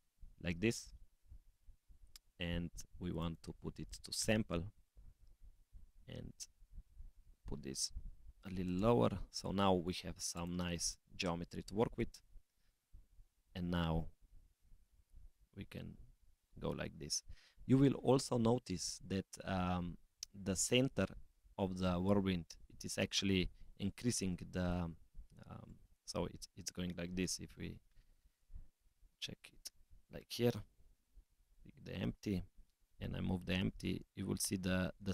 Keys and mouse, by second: 0.8 click, 3.1-4.4 drag, 5.8-9.3 drag, 10.3 click, 10.8 click, 12.1 click, 13.2 g, 25.7 middle click, 27.2 KP_0, 28.4-28.9 middle drag, 29.7 middle drag, 30.3 middle click.